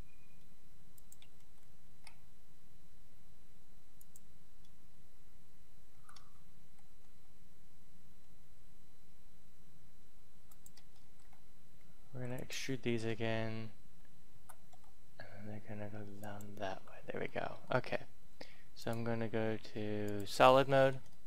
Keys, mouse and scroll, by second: 1.5 ctrl+z, 3.8 click, 5.5-8.2 typing, 10.4 click, 11.0 ctrl+z, 12.0 e, 12.1 click, 14.2 s, 14.6 y, 16.2 click, 16.7 Tab, 17.2 middle click, 18.7 click, 20.7 shift+middle click, 21.1 middle click.